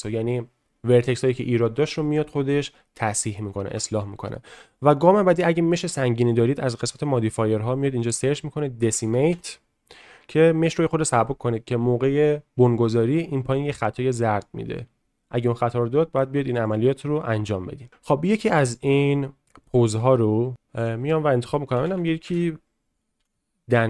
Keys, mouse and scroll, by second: 3.7 Tab, 6.8 click, 7.3-10.7 drag.